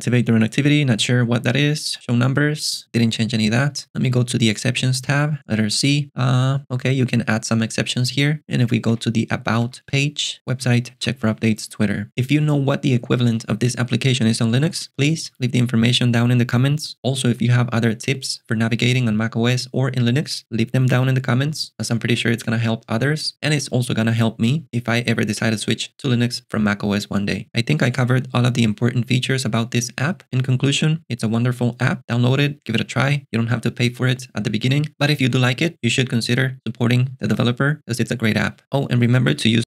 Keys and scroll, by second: 4.8 alt+super+BackSpace, 5.4 c, 9.0 alt+super+BackSpace, 9.6 w.